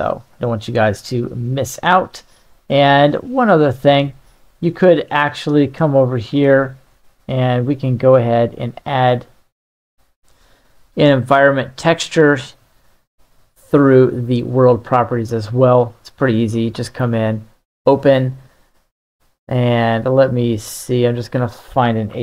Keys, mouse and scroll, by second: 0.0-1.1 middle drag, 7.1 click, 8.4-10.2 drag, 12.3-15.5 drag, 16.5 click.